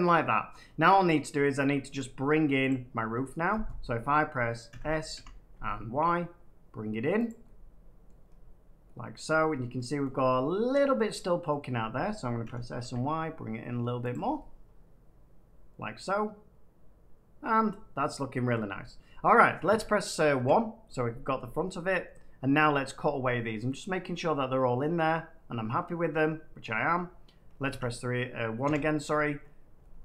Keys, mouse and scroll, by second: 0.4-1.7 middle drag, 1.3-1.7 scroll down 3, 1.7 scroll, 2.6 click, 3.3 middle click, 4.6 s, 5.1 y, 7.2 click, 8.0 middle click, 8.2 scroll, 8.4 scroll up 2, 10.0 middle click, 10.1 scroll up 3, 11.4 middle click, 12.4 s, 12.8 y, 14.0 click, 14.3 middle click, 17.5 middle click, 17.9 scroll down 2, 18.3 middle click, 19.6 3, 20.3 1, 21.5-22.1 shift+scroll up 5, 23.8 middle click, 24.9 middle click, 26.6 middle click, 27.6 3, 28.6 1, 29.3 middle click, 29.5 middle click, 29.9 shift+middle click.